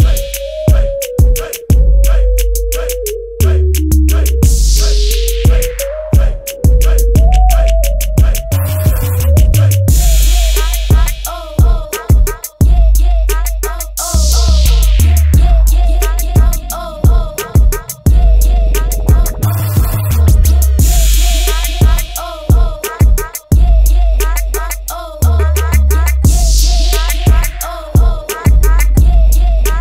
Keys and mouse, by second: 0.0-3.3 drag, 3.3 middle click, 3.8-11.1 drag, 19.5-22.6 middle drag, 22.6-29.8 drag.